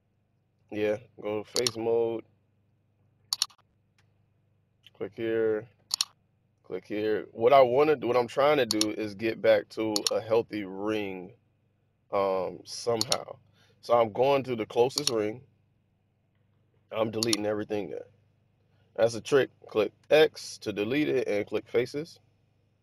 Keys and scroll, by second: 19.9 x, 21.4 f.